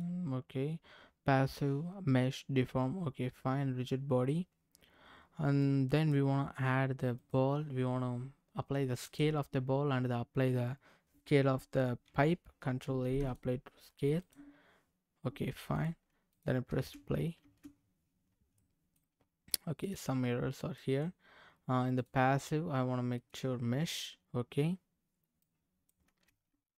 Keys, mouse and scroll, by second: 5.6 click, 7.2 click, 9.0 click, 12.6 ctrl+a, 14.2 click, 15.7 click, 16.3 click, 16.7 space, 17.4 space, 17.7-18.6 scroll down 6, 18.5 scroll up 1, 18.6 middle click, 19.2-19.8 scroll up 4, 19.8 click, 20.4 scroll up 1, 20.7 middle click, 21.9-23.3 drag, 23.7 scroll down 2, 25.4 click, 26.3 space.